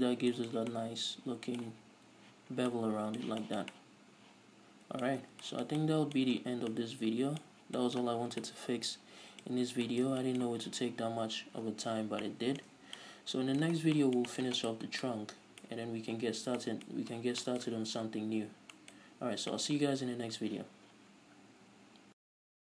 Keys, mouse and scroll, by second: 0.5 scroll down 2, 3.0 scroll down 2, 5.7 scroll down 2, 6.8-7.2 scroll down 2, 7.9-8.2 scroll up 2, 10.0-10.3 scroll up 2, 12.5 scroll down 2, 13.1 scroll up 2, 14.1 scroll up 2, 14.2 scroll down 2, 15.1-15.4 right drag, 15.4 scroll down 2, 15.5-22.6 middle drag, 16.7-17.1 scroll down 2, 17.4-17.9 scroll up 2, 18.9 scroll up 2, 19.5 a.